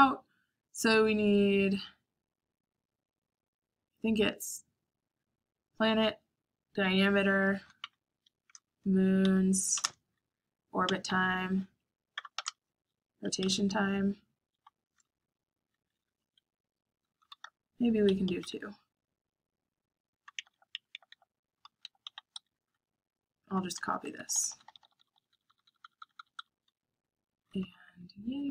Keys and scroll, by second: 0.0-1.5 typing, 7.0-15.6 typing, 16.8 Escape, 16.9-19.5 typing, 19.0 Escape, 21.5-28.5 typing.